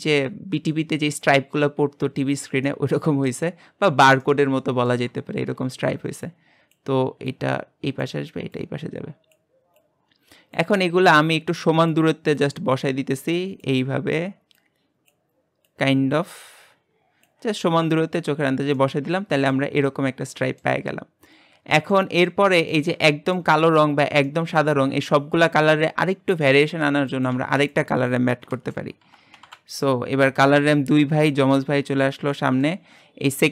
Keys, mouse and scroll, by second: 0.3-1.4 scroll down 8, 1.4-2.7 scroll up 9, 2.7-3.5 middle drag, 3.5-4.3 scroll down 6, 4.3-6.3 shift+middle drag, 6.3-18.4 drag, 18.4-18.7 scroll down 2, 18.7-19.7 middle drag, 19.7-20.4 scroll down 5, 20.4-20.8 middle drag, 20.8-21.3 scroll up 3, 22.3-23.6 middle drag, 23.6-24.3 scroll up 6, 24.3-31.1 shift+middle drag, 33.1-33.5 scroll up 7.